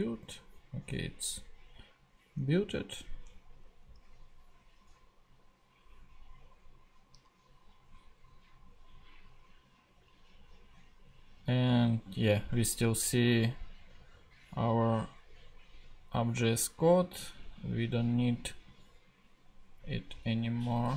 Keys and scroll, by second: 20.3 BackSpace.